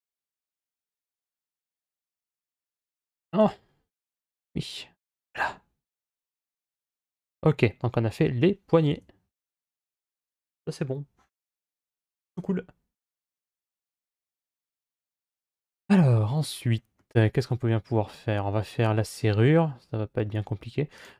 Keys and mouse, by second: 6.9-8.6 middle drag, 8.8 Tab, 16.8 middle click, 17.5-18.3 middle drag.